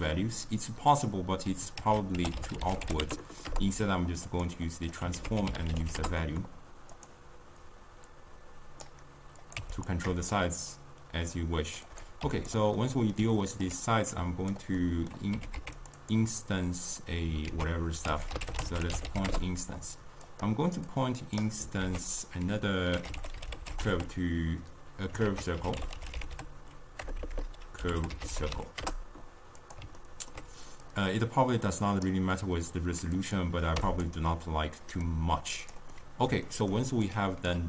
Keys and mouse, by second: 4.4 ctrl+a, 8.9-37.6 drag.